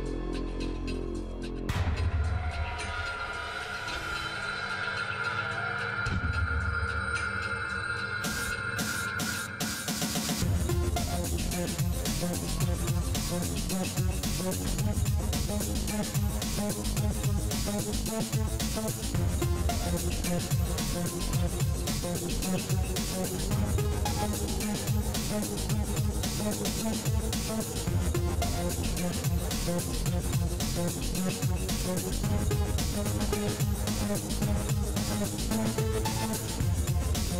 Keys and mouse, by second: 0.3 click, 6.5 click, 6.5 right click, 6.7 KP_3, 6.8-8.3 drag, 9.9-12.1 drag, 13.0 KP_1, 13.8 right click, 14.6-19.1 drag, 15.8-18.8 right drag, 18.6 ctrl+s, 19.3 KP_3, 21.2 e, 23.9 e, 28.9 KP_1, 30.2 click, 31.1-34.8 middle drag, 34.8 ctrl+s.